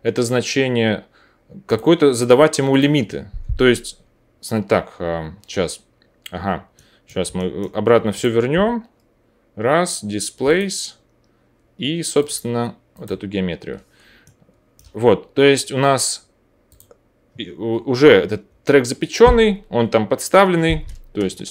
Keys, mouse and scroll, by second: 2.8-8.2 middle drag, 8.2-10.4 drag, 8.5 o, 10.5-12.1 drag, 13.0-16.6 drag, 16.6 middle click, 16.7-21.5 drag.